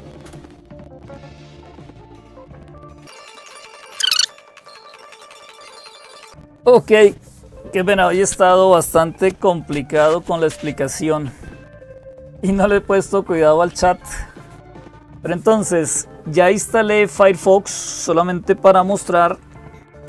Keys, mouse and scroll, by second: 0.0-20.0 typing.